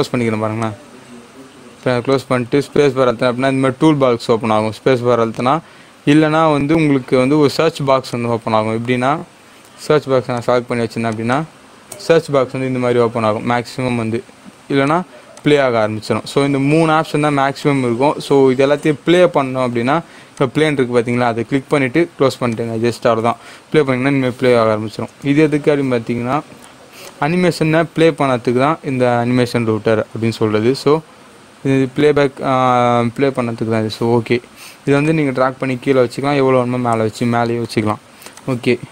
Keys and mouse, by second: 35.1 click.